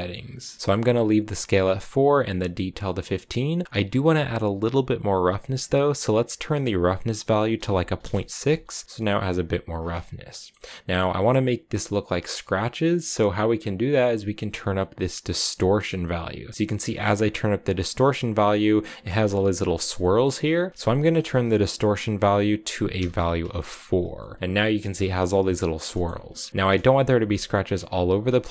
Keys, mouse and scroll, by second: 5.5-8.6 drag, 10.1-13.2 middle drag, 14.5-16.9 drag, 16.9-19.6 scroll up 5, 20.6-23.4 drag, 23.7 scroll down 4, 24.0 shift+middle click, 24.2-24.8 scroll up 6, 24.8 shift+middle click, 25.1-25.7 scroll down 6, 25.7 shift+middle click, 26.2-28.2 scroll down 5, 28.2-28.5 scroll down 3.